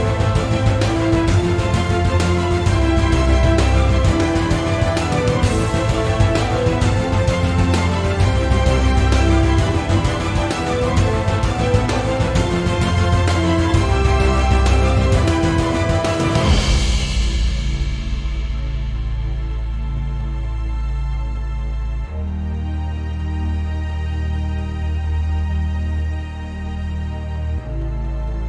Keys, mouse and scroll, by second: 0.4 shift+d, 0.8 right click, 1.3 p, 2.0 Tab, 3.0 click, 3.3 Tab, 4.0 click, 4.3 Tab, 4.6 a, 5.0-6.8 middle drag, 5.3-6.8 scroll up 2, 6.8-10.0 drag, 9.8 scroll down 2, 10.0-13.6 middle drag, 12.2-13.6 scroll up 2, 13.6-14.9 drag, 14.9-15.8 middle drag, 15.2-15.8 scroll down 2, 15.8-19.3 drag, 17.7 KP_Enter, 19.3-20.4 middle drag, 19.5-20.4 scroll up 2, 20.4-22.5 drag, 21.8 Tab, 23.0 Tab, 24.2 click, 24.9 alt+shift+click, 25.7-26.4 scroll up 2, 26.4-27.0 scroll down 2, 27.0-28.4 scroll down 1.